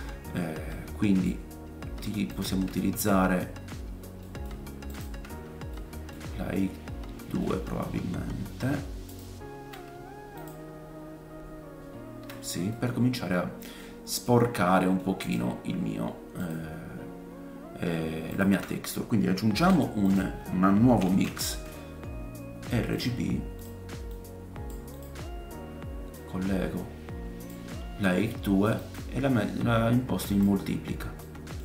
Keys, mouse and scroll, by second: 0.7 middle click, 1.5 scroll down 2, 1.6 click, 1.6 middle click, 1.6 right click, 2.6-5.4 ctrl+shift+drag, 4.2 middle click, 5.4-8.5 right drag, 5.7 middle click, 6.3 scroll up 2, 7.2 scroll up 2, 8.0-8.4 scroll down 2, 8.5-13.6 ctrl+shift+drag, 12.7 middle click, 13.2-13.8 scroll down 3, 13.8 middle click, 14.7 middle click, 15.2-24.2 drag, 15.8 scroll up 1, 19.5 shift+a, 24.1 middle click, 24.1 right click, 25.0-26.2 drag, 30.6 click, 31.2 middle click, 31.2-31.6 scroll up 1.